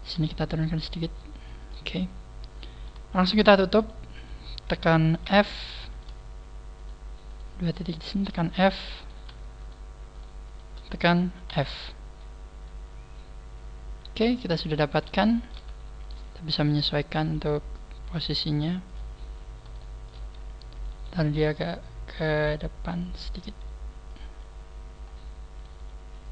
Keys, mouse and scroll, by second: 0.1 g, 1.6 click, 2.0 middle click, 3.2 shift+right click, 3.8 shift+right click, 5.2 shift+right click, 5.2 f, 5.9 shift+right click, 6.8 shift+right click, 7.2 shift+right click, 7.8 shift+right click, 8.2 f, 9.0 shift+right click, 9.6 shift+right click, 10.1 shift+right click, 10.4 shift+right click, 11.5 f, 11.8 scroll down 2, 12.2 middle click, 14.8 scroll up 3, 15.2 shift+middle click, 16.0 right click, 16.3 scroll up 1, 16.7 scroll down 1, 16.8-17.1 scroll down 3, 17.2 g, 18.9 click, 19.2-19.6 scroll down 1, 19.8 shift+middle click, 20.3 scroll up 2, 20.7 right click, 20.9 g, 23.0 click, 23.3 right click, 23.4 g, 24.1 click, 24.3 scroll down 2, 25.0 scroll down 2, 25.6 right click, 25.7 g.